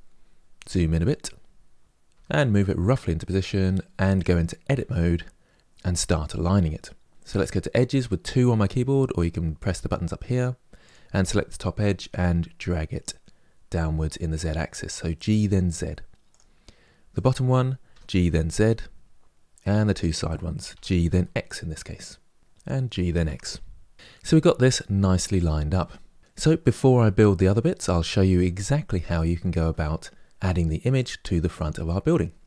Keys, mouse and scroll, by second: 1.8 g, 4.4 Tab, 7.1 2, 10.5 click, 11.4 g, 16.8 click, 17.6 g, 19.4 click, 20.4 g, 22.4 click, 22.6 g, 25.2-26.2 middle drag.